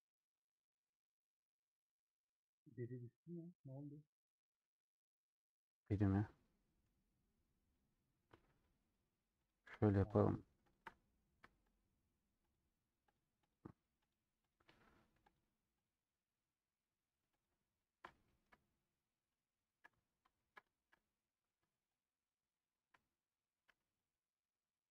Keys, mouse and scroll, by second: 0.5 click, 0.9-2.9 middle drag, 2.9 a, 4.2 middle click, 4.4 scroll up 1, 4.6 middle click, 5.0 scroll up 1, 5.1 middle click, 5.7 scroll down 1, 5.9-6.5 scroll up 1, 6.5 middle click, 7.4-7.9 scroll up 1, 9.6 click, 10.9 middle click, 11.8 shift+click, 12.6 shift+click, 18.0-19.5 middle drag, 19.5 shift+click, 19.9 scroll up 2, 20.5 ctrl+z, 20.6-22.0 shift+middle drag, 22.0 shift+click, 22.7 shift+click, 23.6 a, 24.5-24.9 scroll down 2.